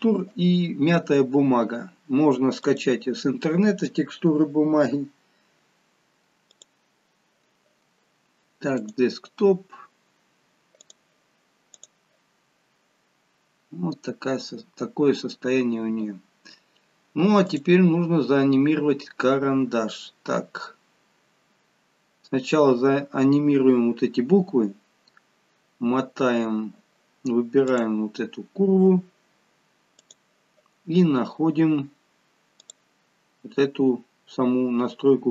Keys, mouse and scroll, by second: 5.2 click, 6.4 click, 13.1 scroll up 4, 13.9 scroll down 1, 15.2 scroll down 1, 17.5 click, 22.7-23.1 scroll down 2, 25.0-25.5 scroll down 4, 27.7 click, 30.0 click, 31.0-31.4 scroll down 4, 32.6 click.